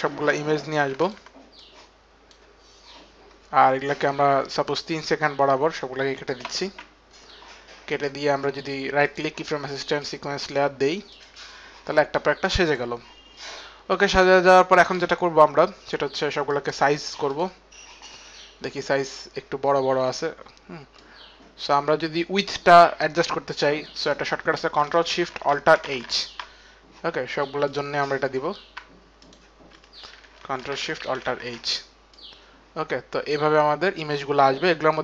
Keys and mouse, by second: 0.8 ctrl+a, 0.8 ctrl+click, 4.1 ctrl+click, 4.4 ctrl+click, 7.7 right click, 9.8 click, 9.8 right click, 12.5 click, 14.1 click, 16.3 click, 18.7 click, 20.5 click, 21.3 click, 25.5 ctrl+alt+shift+h, 26.1 ctrl+alt+shift+h, 28.8 ctrl+alt+shift+h, 29.0 shift+click, 31.0 ctrl+alt+shift+h, 31.0 shift+click, 31.9 ctrl+alt+shift+h, 31.9 shift+click.